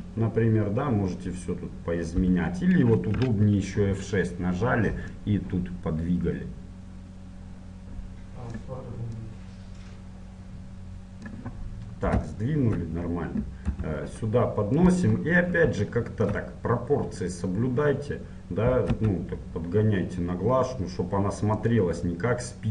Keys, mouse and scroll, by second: 2.6 t, 3.4-5.3 scroll up 1, 5.3 F6, 12.5-14.3 middle drag, 13.9 g, 15.4-18.2 middle drag, 19.2 s.